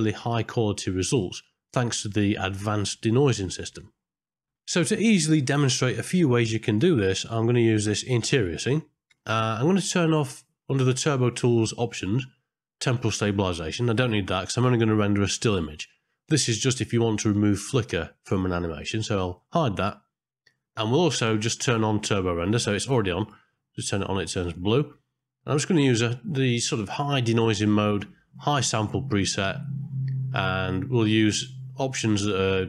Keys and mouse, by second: 10.2 middle click, 13.9 click, 19.3 click, 22.4 click, 23.2 click, 24.9 middle click.